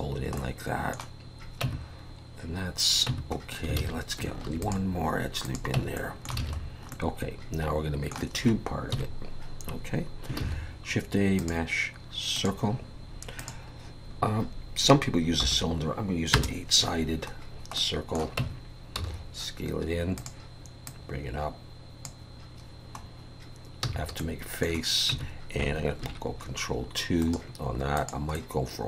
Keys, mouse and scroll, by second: 0.4 middle click, 1.6 Tab, 3.1 Tab, 3.4 scroll up 2, 3.8 alt+a, 4.4 ctrl+r, 5.8 Tab, 6.0 middle click, 6.4 alt+a, 6.6 scroll down 2, 6.9 middle click, 8.9 KP_1, 10.4 shift+a, 13.4 click, 17.4-17.8 scroll down 2, 17.8 middle click, 18.4 Tab, 18.9 s, 20.9 click, 23.0-23.8 scroll up 2, 23.8 f, 24.2 middle click, 25.1 Tab, 26.0 ctrl+2, 27.2 right click, 28.3 middle click.